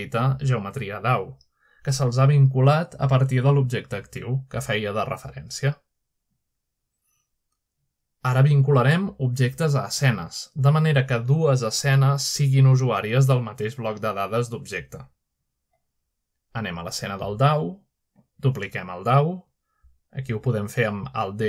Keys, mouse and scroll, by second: 1.6-2.4 middle drag, 2.2-2.5 scroll up 1, 2.4 click, 7.3-8.1 drag, 9.4-9.9 shift+middle drag, 14.9-15.9 middle drag, 15.4-15.9 scroll down 1, 17.0-18.1 middle drag, 18.1 click, 18.8 click, 19.5 drag, 19.5-20.4 scroll down 1, 19.9 shift+middle drag, 20.2-21.0 middle drag, 20.8-21.4 drag.